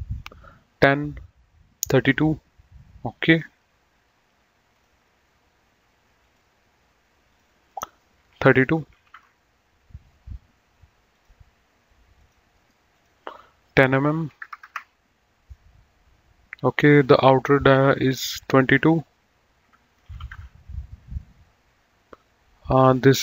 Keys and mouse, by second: 3.3 click, 4.7 click, 6.2 click, 8.7 KP_3, 9.2 Return, 11.0 click, 12.5 right click, 12.9 click, 14.2 KP_1, 14.4 KP_0, 14.7 Return, 17.8 click, 20.0 KP_2, 20.4 KP_Enter, 22.5 click.